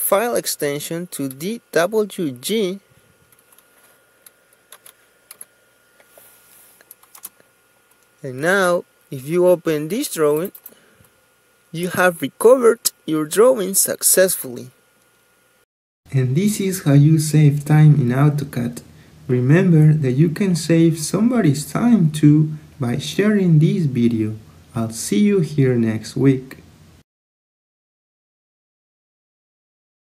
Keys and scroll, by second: 4.2-4.8 typing, 6.6 Return.